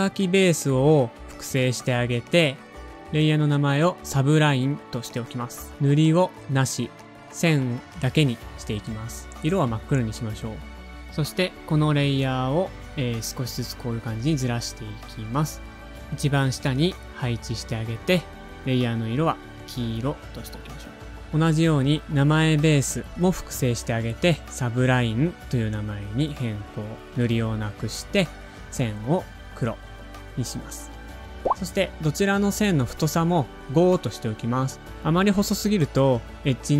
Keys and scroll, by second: 0.2 Return, 0.7-4.5 typing, 11.7 super+Down, 11.7 typing, 11.9 super+Up, 12.1 shift+Right, 12.3 shift+Right, 13.1 shift+Down, 13.4 shift+Right, 14.1 shift+Down, 14.3 shift+Left, 15.1 shift+super+{, 20.4 super+d, 23.6 Return, 23.6-24.8 typing, 24.9 Return, 32.2-33.0 typing, 33.4 shift+super+a, 34.7 shift+Up, 34.8 shift+Up, 35.1 shift+Right.